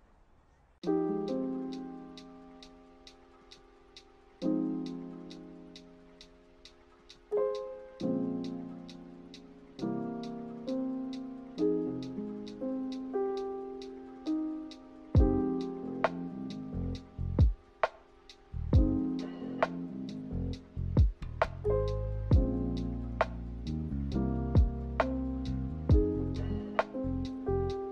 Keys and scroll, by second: 3.3 ctrl+z, 4.4 a, 7.4 a, 16.5 ctrl+z, 16.9 ctrl+z, 26.2-27.9 typing.